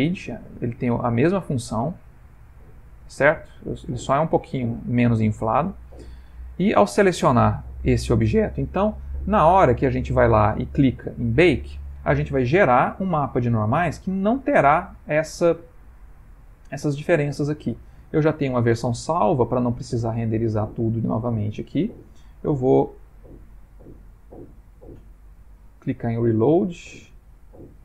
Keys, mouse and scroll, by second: 2.6 click, 12.9 scroll.